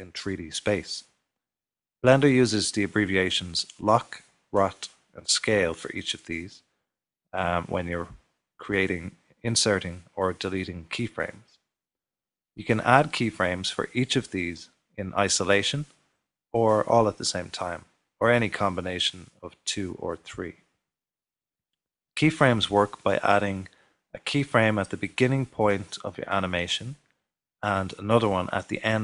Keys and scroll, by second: 0.0-2.2 typing, 6.3-9.2 typing, 25.3 typing.